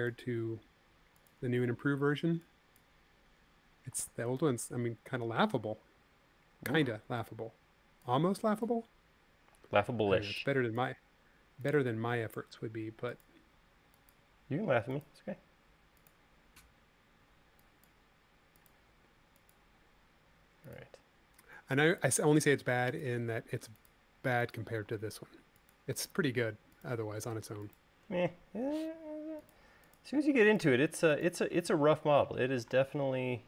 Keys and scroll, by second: 2.3 e, 4.9 super+z, 10.6 Escape, 11.7 l, 14.2 e, 17.7 e, 18.7 l, 25.5 space.